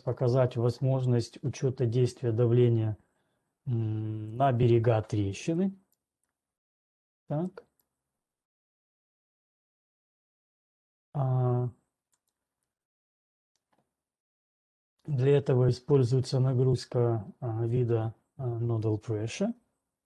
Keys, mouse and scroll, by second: 4.8 click, 6.2 right click, 7.2 middle click, 8.2 right click, 8.7 right click, 8.9 scroll, 9.7-10.2 scroll, 12.3 click, 12.7 click, 13.7 scroll.